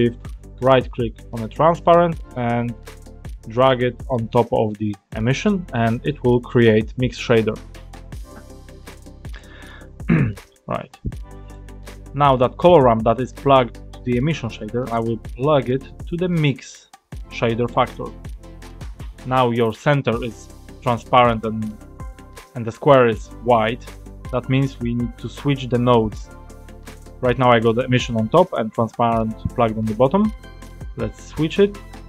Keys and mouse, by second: 0.6-5.4 ctrl+shift+drag, 6.5 click, 9.4 middle click, 11.5 click, 14.8-17.9 drag, 21.8-22.4 drag, 26.5 click, 30.5-31.4 drag.